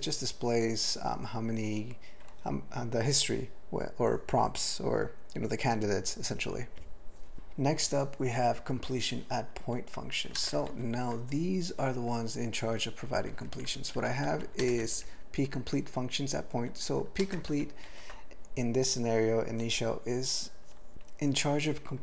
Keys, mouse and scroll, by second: 7.3 alt+b, 10.4 ctrl+space, 10.7 ctrl+g, 13.7 ctrl+n, 14.0 ctrl+f, 14.2 ctrl+f, 14.3 ctrl+f, 14.6 ctrl+space, 14.8 ctrl+alt+b, 16.6 ctrl+g, 17.2 ctrl+space, 17.5 ctrl+alt+f, 17.9 ctrl+g.